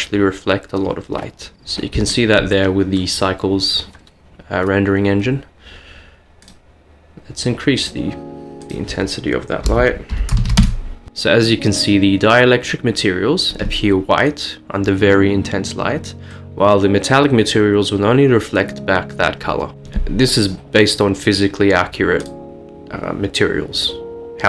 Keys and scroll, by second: 11.1 Return, 11.1 typing, 17.5 typing.